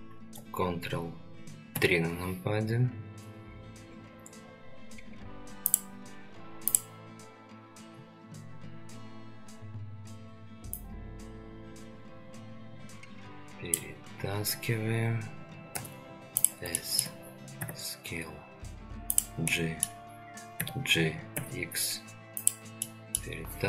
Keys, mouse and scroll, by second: 1.7 ctrl+KP_3, 14.5-15.7 scroll up 1, 15.7 scroll up 1, 15.7 s, 16.8 shift+middle drag, 17.6 g, 19.5-19.9 middle drag, 20.6 g, 22.8 middle click.